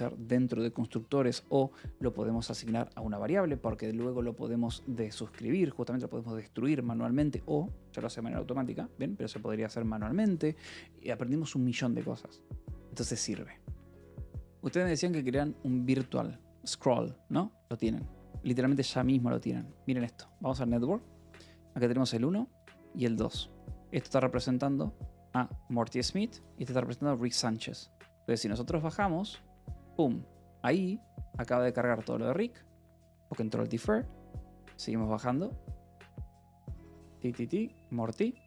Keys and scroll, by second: 14.1 ctrl+r.